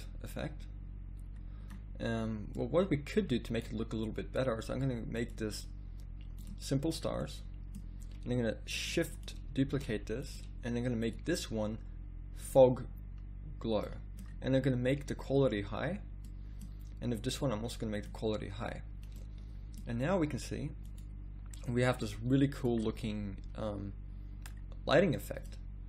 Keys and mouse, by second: 9.8 d.